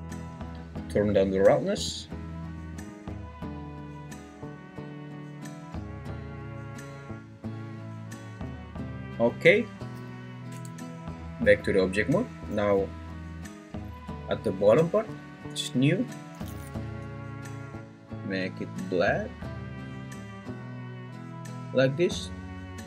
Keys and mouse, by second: 1.8-8.8 drag, 10.5 Tab, 14.8 click.